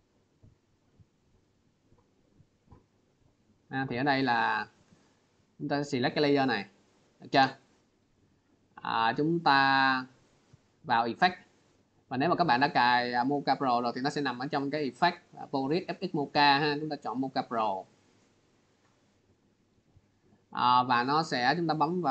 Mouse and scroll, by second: 1.8 click, 3.5-3.9 scroll, 4.1 click, 4.7 click, 9.6 click, 10.7 click, 10.7 click, 16.9 click.